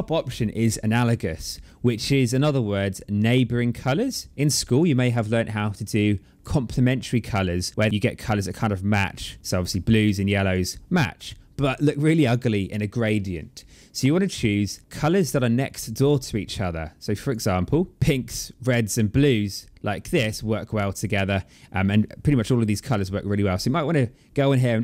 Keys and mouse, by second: 1.9 click, 6.2 click, 7.9 click, 14.4 click, 15.4 click, 18.0 click, 20.7 click.